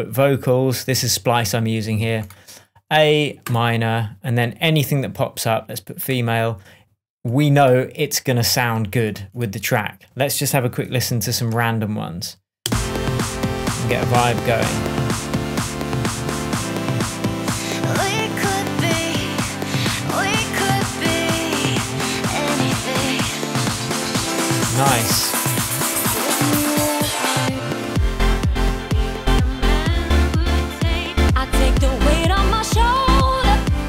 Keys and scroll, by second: 12.6 space.